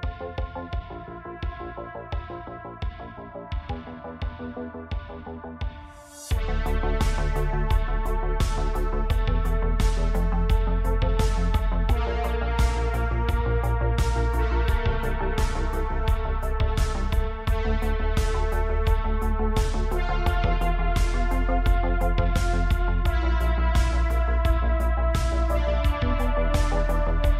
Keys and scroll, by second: 9.2 h, 12.2 Tab, 12.7 Tab, 16.2 Tab, 17.4 3, 21.7 Tab, 22.8 Tab, 23.1 3, 24.3 ctrl+KP_Add, 24.5 ctrl+KP_Add, 24.6 ctrl+KP_Add, 27.0 Tab.